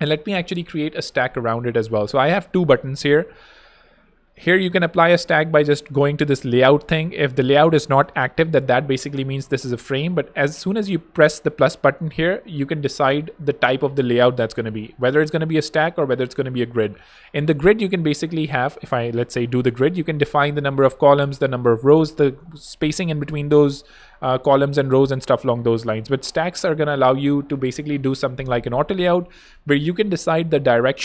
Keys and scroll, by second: 0.2 alt+super+z, 0.5 alt+super+Return, 2.0 super+d.